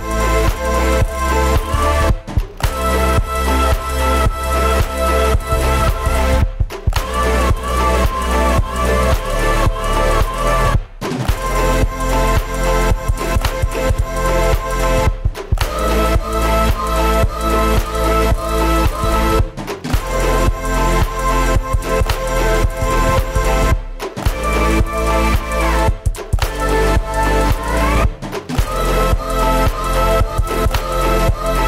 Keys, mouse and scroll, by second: 0.2 1, 0.3 right click, 0.6 o, 2.2 right click, 2.4 g, 3.3 right click, 3.6 click, 5.8 Tab, 6.1 middle click, 6.3 Tab, 7.5 KP_0, 7.7 scroll down 3, 8.0 Tab, 8.3 right click, 8.5 a, 8.7 g, 10.8 e, 11.3-12.3 drag, 13.8 KP_7, 14.1 right click, 14.4 b, 14.6 middle click, 15.1-15.8 scroll up 4, 16.2 click, 18.2-21.7 drag, 21.9 KP_0, 22.5 click, 23.0 right click, 23.1 Tab, 23.4-23.7 scroll down 1, 23.7-24.7 scroll up 6, 26.6 middle drag, 26.8 scroll up 4, 26.9 shift+middle click, 27.2 scroll down 1, 27.2-28.0 middle drag, 28.0 right click, 28.2 shift+a.